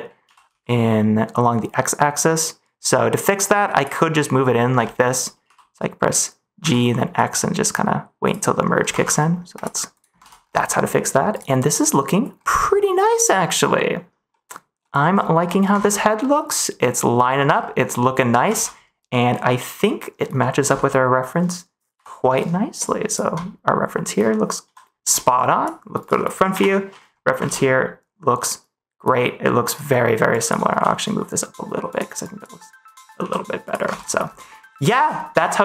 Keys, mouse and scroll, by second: 0.2 g, 0.4 x, 3.7 click, 4.1 middle click, 4.4-4.9 scroll up 2, 4.9 middle click, 5.4 g, 6.5 x, 8.2 click, 8.9 ctrl+s, 9.1 middle click, 10.6 middle click, 11.6 middle click, 12.5 middle click, 13.0 middle click, 14.2 middle click, 14.7 middle click, 15.4 middle click, 15.6 Tab, 16.2-17.2 middle drag, 17.8 middle click, 18.5 ctrl+s, 20.3 middle click, 20.6 Tab, 23.0 Tab, 27.4 ctrl+s, 30.3 click, 30.7 g, 31.8 click, 32.2 click, 33.1 g, 33.6 click, 33.8 ctrl+s, 34.5 middle click.